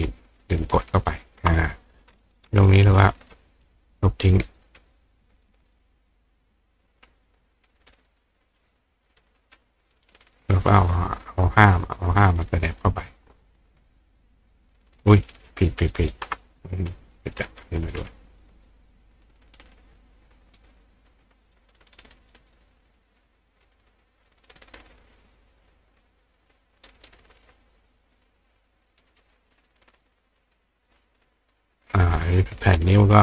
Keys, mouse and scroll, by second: 0.4-1.9 ctrl+drag, 2.6-3.9 drag, 4.4 drag, 6.4 click, 8.2 click, 8.6-9.2 drag, 10.4-10.9 drag, 13.5-16.1 ctrl+drag, 16.1-27.1 ctrl+right drag, 17.0 click, 18.4 click, 19.1 click, 19.7 click, 21.5-27.4 drag, 28.6-30.5 drag, 29.0 right click, 31.0 click, 31.5-32.2 drag.